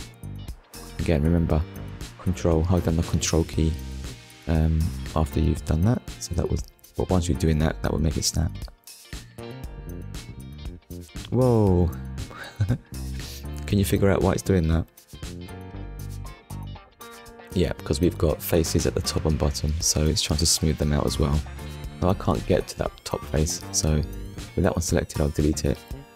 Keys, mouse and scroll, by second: 1.1 scroll down 1, 1.8 shift+middle click, 4.5 Tab, 5.1 middle click, 5.6 z, 6.0 click, 6.5 scroll down 1, 7.2 right click, 7.8 click, 9.1 click, 10.7 click, 13.1 click, 14.0 shift+middle click, 16.0 Tab, 17.0 middle click, 19.3 middle click, 20.1 shift+click, 20.7 shift+click, 21.6 middle click, 23.8 Delete, 24.6 click, 25.2 middle click.